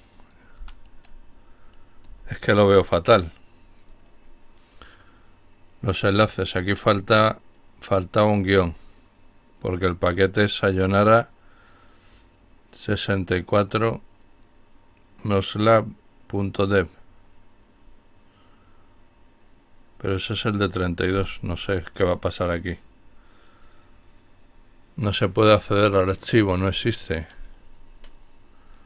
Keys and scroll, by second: 1.1-2.4 typing, 20.3 Return.